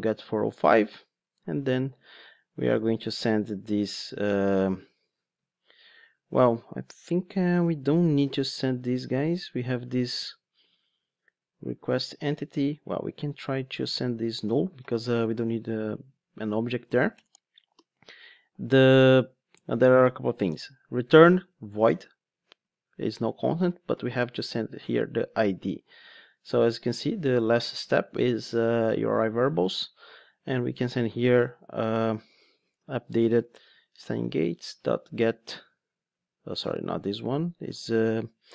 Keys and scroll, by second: 8.1 super+p, 26.8 super+p, 29.7 Escape, 33.5 Return, 35.4 super+z.